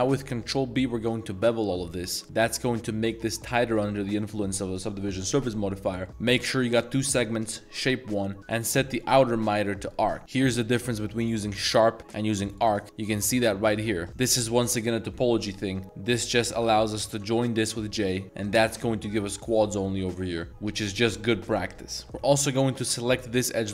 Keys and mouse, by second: 3.4 middle drag, 3.4 z, 4.2 middle drag, 5.0 middle click, 5.9 middle click, 8.4-10.1 drag, 10.2 ctrl+b, 10.5-11.4 drag, 12.0-12.7 drag, 13.9 z, 14.1 1, 16.2 shift+click, 17.2 j, 17.8-18.2 middle drag, 18.8 3, 19.1 click, 19.5 z, 19.8 middle click, 22.5 middle click, 23.1 alt+shift+click.